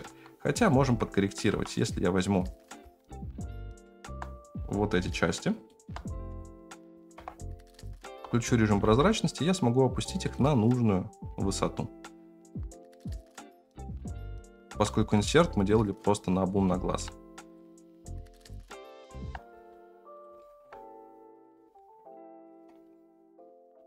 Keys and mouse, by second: 0.0 alt+z, 0.8 Tab, 1.5 2, 1.7-3.1 right drag, 3.8 shift+middle click, 6.2 KP_1, 7.1 KP_0, 8.0 alt+z, 8.8 g, 12.8 shift+middle click, 14.9 g, 16.7 shift+middle click, 17.4 click, 17.8 shift+middle click, 19.4 g, 20.4 middle click, 21.3 click, 21.5 g, 22.9 middle click.